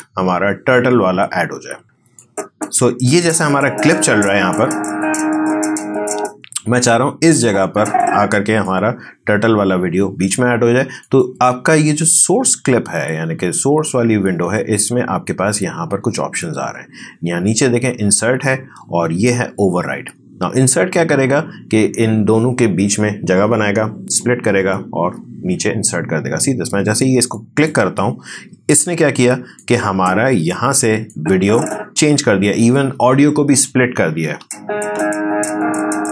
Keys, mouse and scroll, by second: 2.2 click, 3.1 space, 6.0 space, 7.3-11.0 drag, 27.3-34.3 drag, 34.3 space.